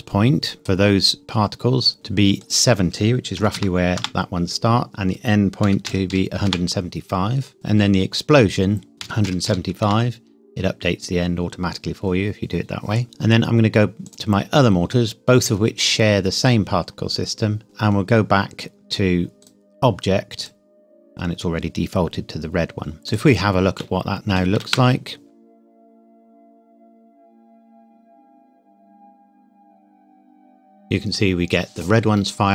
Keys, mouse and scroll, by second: 2.5 click, 3.4 KP_7, 3.5 KP_0, 4.0 KP_Enter, 4.9 click, 5.6 KP_1, 5.8 KP_7, 6.1 KP_5, 6.5 KP_Enter, 7.5 click, 9.0 KP_1, 9.2 KP_7, 9.5 KP_5, 9.8 KP_Enter, 13.0-14.1 scroll up 1, 14.1 click, 16.8-18.8 scroll down 1, 19.4 click, 22.5-23.0 scroll up 1, 23.1 click, 23.8 shift+middle click, 23.9 shift+middle click, 24.6 shift+Caps_Lock, 25.1 space.